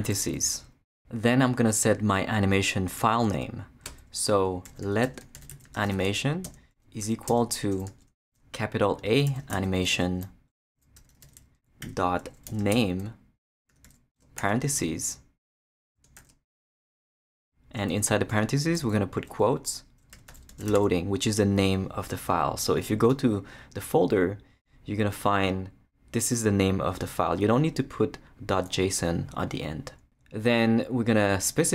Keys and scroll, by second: 3.9 Return, 4.4-7.9 typing, 9.0-14.4 typing, 16.2 shift+0, 16.8 shift+Left, 17.4 Left, 17.9 shift+', 18.8 shift+Left, 19.6 Left, 19.9-21.2 typing.